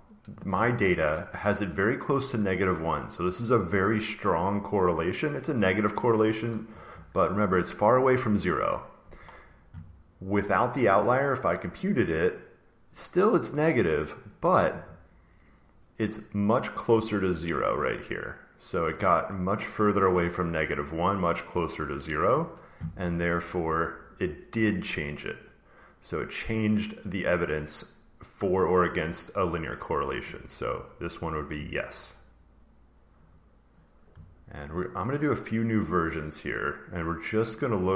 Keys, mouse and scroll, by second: 1.9 click, 3.1 click, 11.6 click, 12.8 click, 17.1 click, 19.7 click, 21.1 click, 27.0 click, 30.6 click, 33.2 click, 37.3 click.